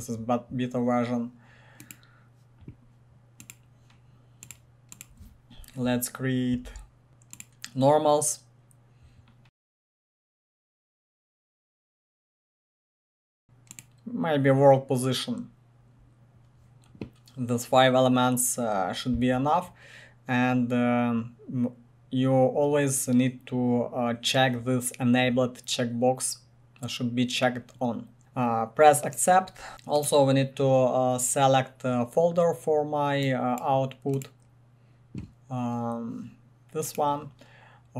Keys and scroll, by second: 6.6 ctrl+v, 11.7 ctrl+v.